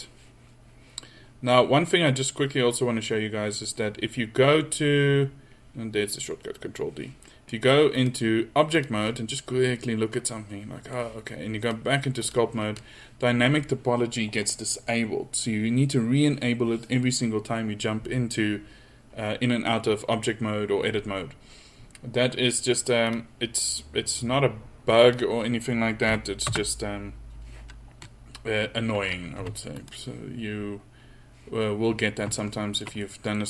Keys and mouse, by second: 10.6 middle click, 12.5-13.5 drag, 29.5 f, 32.4 drag.